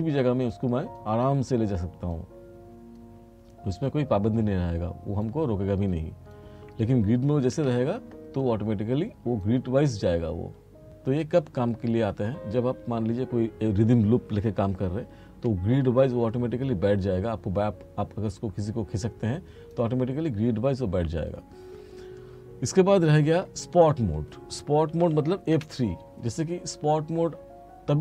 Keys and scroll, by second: 7.6 F4, 15.0 r, 24.9 r, 25.6 F3.